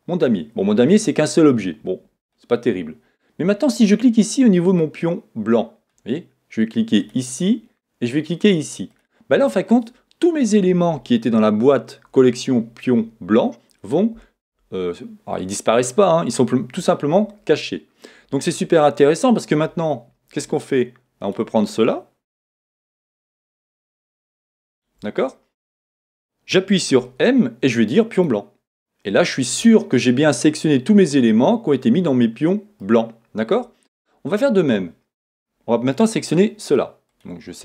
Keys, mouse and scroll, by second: 28.3 m, 29.6 middle click, 37.2 click.